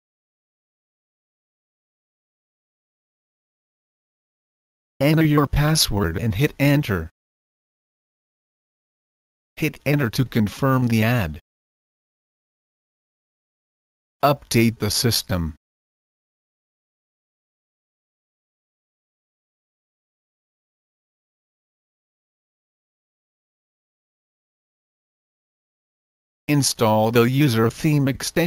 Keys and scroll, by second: 0.0-2.6 typing, 5.9 Return, 9.8 Return, 13.8-18.5 typing, 18.7 Return, 25.9-28.4 typing.